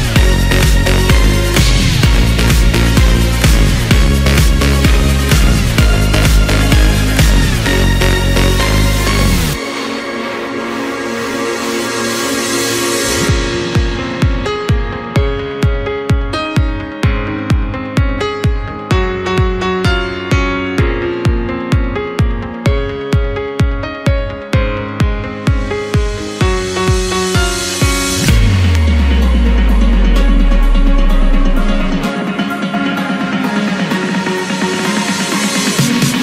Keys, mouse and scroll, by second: 0.1-1.2 right drag, 1.2-2.3 middle drag, 2.3 KP_1, 2.9 scroll up 1, 3.2-4.7 scroll down 4, 4.7 shift+d, 8.3 s, 10.2-10.6 scroll up 2, 10.6 scroll down 3, 10.9-11.4 middle drag, 11.4-12.1 scroll up 2, 12.1 shift+click, 13.3 ctrl+j, 14.0 scroll up 2, 14.7-15.7 middle drag, 15.7 Tab, 17.0 ctrl+KP_7, 17.8-18.9 scroll up 1, 18.9 2, 19.9 click, 20.1 click, 20.5-21.0 scroll down 2, 21.0 middle click, 21.7 scroll down 2, 21.9 middle click, 22.4-23.8 scroll up 2, 23.8 shift+b, 25.5 scroll down 2, 25.8-27.2 middle drag, 27.2 shift+click, 28.1-28.9 scroll down 10, 28.9 KP_1, 30.0-33.0 right drag, 34.4 ctrl+r.